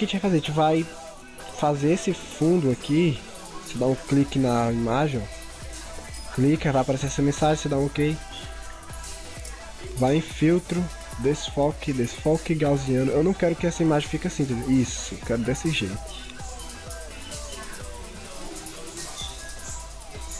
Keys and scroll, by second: 5.3 ctrl+z.